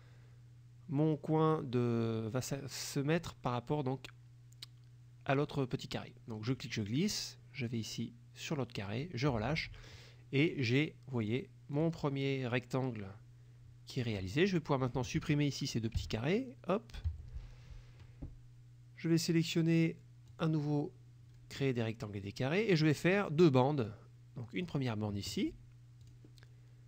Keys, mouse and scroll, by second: 6.6-9.3 drag, 11.3 click, 11.8 click, 14.1 click, 16.1 Delete, 17.0 click, 17.1 Delete, 20.4 click, 23.9 click, 26.1 click.